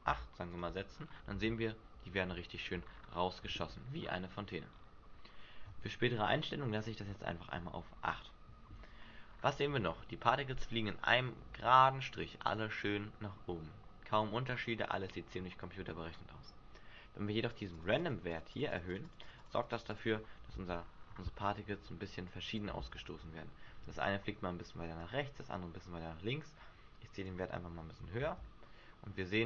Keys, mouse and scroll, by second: 0.8-1.4 scroll down 8, 1.3 alt+a, 2.4 shift+middle click, 2.9-3.5 scroll down 2, 3.5-3.9 scroll up 7, 4.3 Escape, 4.7-5.0 scroll up 3, 6.4 shift+middle click, 9.1-10.0 scroll down 5, 9.8 alt+a, 10.8-11.5 scroll down 4, 11.5 alt+a, 13.5-16.0 scroll up 12, 17.5 click, 17.7 click, 18.3 click, 18.5 click, 19.0 click, 19.1 click, 19.3 click, 19.5 click, 19.7 click, 20.4 alt+a, 20.7-21.0 scroll down 1, 21.5 scroll down 8, 21.6 Escape, 22.2 click, 23.7 Escape, 25.0 click, 28.1 alt+a.